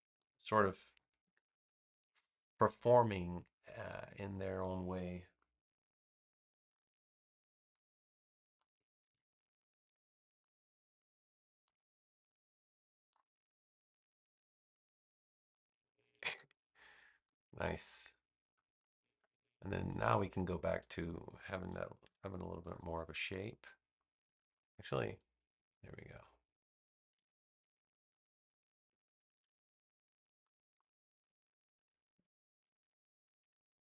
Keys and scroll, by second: 1.1 super+v, 4.4 a, 16.8 space, 22.0 super+c, 22.4 space, 27.5 super+c, 27.9 space, 29.3 super+v, 31.2 -, 32.1 BackSpace.